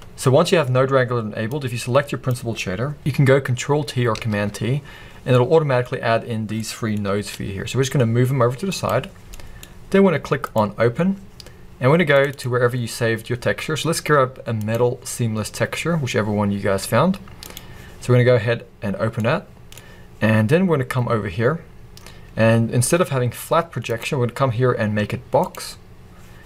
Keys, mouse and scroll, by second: 0.9-7.4 drag, 4.2 ctrl+t, 7.4-11.6 middle drag, 7.4 g, 11.6-21.3 drag, 21.3-22.4 scroll up 2, 22.4-23.0 scroll up 1, 23.0-25.6 middle drag, 25.6-26.4 drag.